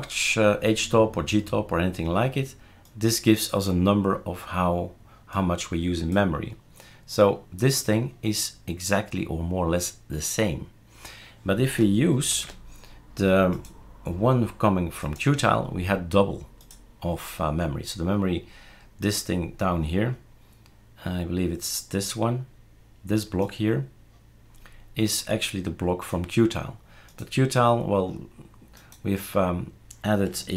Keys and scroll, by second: 12.3 super+q.